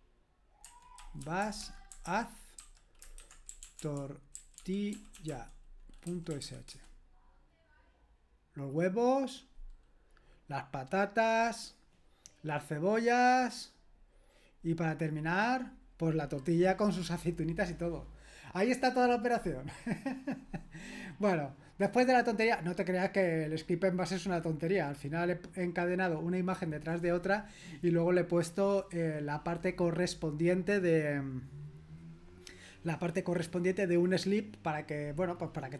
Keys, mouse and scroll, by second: 0.4-6.9 typing.